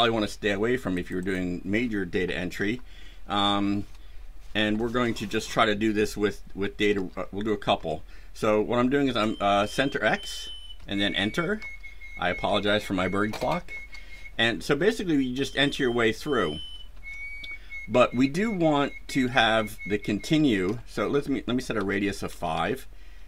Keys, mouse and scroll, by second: 0.9 click, 2.7 BackSpace, 6.9 KP_0, 7.7 Caps_Lock, 10.7 KP_Enter, 11.5 KP_0, 12.9 KP_Enter, 13.7 KP_0, 16.8 KP_Enter, 19.3 Down, 20.6 Up, 21.7 KP_5, 22.5 BackSpace.